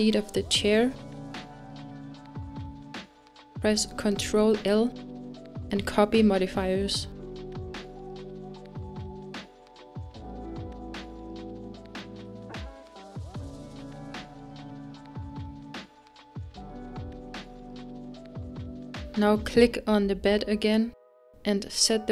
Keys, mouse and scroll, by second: 3.7 shift+click, 6.0 ctrl+l, 12.7 scroll up 1, 13.6 click, 14.0 ctrl+z, 17.2 click, 21.9-22.1 drag.